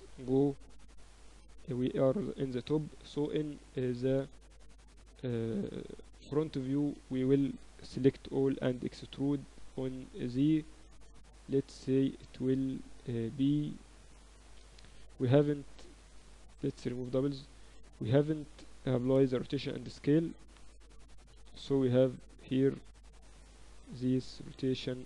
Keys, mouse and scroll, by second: 0.9 Tab, 2.9 KP_1, 4.3 Tab, 4.5 a, 4.7 a, 7.5 a, 8.5 a, 8.5 e, 16.4 a, 16.6 a, 16.8 w, 18.8 Tab, 19.6 ctrl+a, 21.9 n, 23.0-25.0 drag.